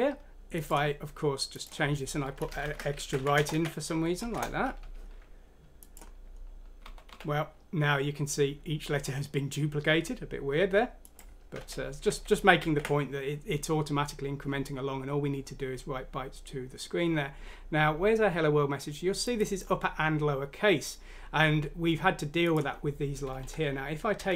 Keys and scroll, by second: 2.4 Home, 2.6 End, 3.0 ctrl+c, 3.2 ctrl+End, 3.5 ctrl+v, 4.2 ctrl+F6, 4.4 ctrl+Return, 6.8-7.1 typing, 11.6 ctrl+z, 12.0 ctrl+z, 12.6 ctrl+z, 23.4 Up, 24.1-24.3 typing.